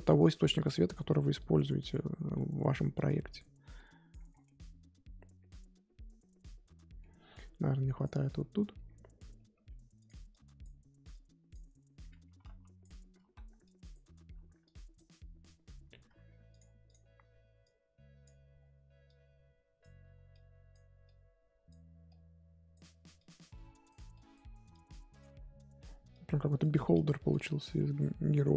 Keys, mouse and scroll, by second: 0.5-1.9 drag, 1.9-2.9 middle drag, 2.9-4.3 drag, 4.3 scroll down 2, 4.4-8.0 middle drag, 8.0 click, 8.3-9.1 scroll up 4, 9.5 f, 10.3-13.2 drag, 13.2 ctrl+z, 13.6 click, 14.3 ctrl+z, 14.6-18.5 drag, 18.5-19.0 scroll down 1, 19.0-25.8 drag, 25.8-26.1 scroll up 1, 26.1-27.6 drag, 27.6-28.2 scroll down 9, 28.2-28.5 scroll up 4.